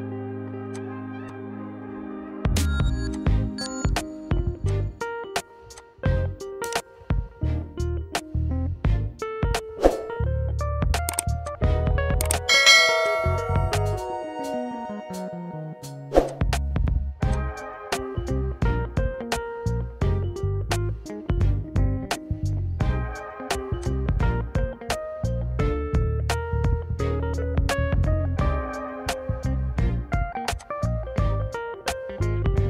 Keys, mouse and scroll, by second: 0.8 click, 1.4 click, 2.2 right click, 3.3 click, 4.7 click, 5.9 click, 6.8-7.2 typing, 8.3 Return, 11.6 click, 14.4 click, 16.5 click, 18.5 click, 21.0 ctrl+r, 23.9 click, 25.6 s, 30.7 click.